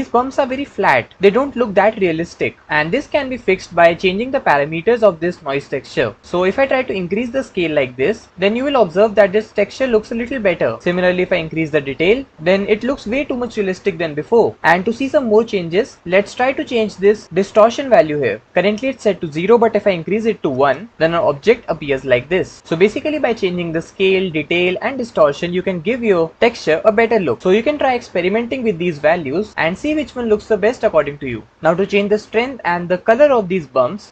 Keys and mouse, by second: 0.0 click, 6.5-8.3 drag, 10.9-12.3 drag, 17.3-20.5 drag.